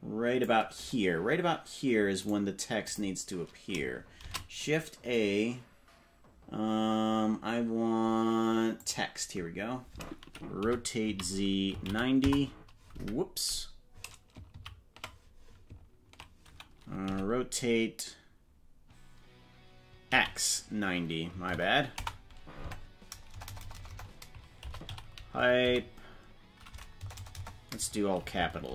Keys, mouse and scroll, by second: 2.2 right click, 2.8 click, 4.2 shift+a, 10.6 r, 13.0 Escape, 14.8 ctrl+z, 17.0 r, 22.6 Tab, 23.3-25.6 typing, 26.9-28.7 typing.